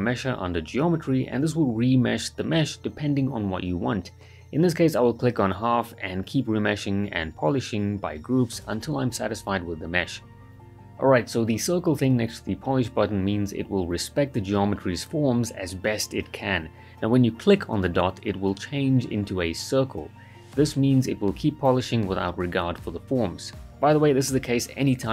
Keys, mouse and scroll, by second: 7.6-8.0 right drag, 9.9-10.9 alt+right click, 11.5-12.1 right click, 12.2 alt+right click, 13.9 click, 15.7-16.8 alt+right click, 18.0-21.1 drag, 22.9 right click, 24.8 ctrl+z.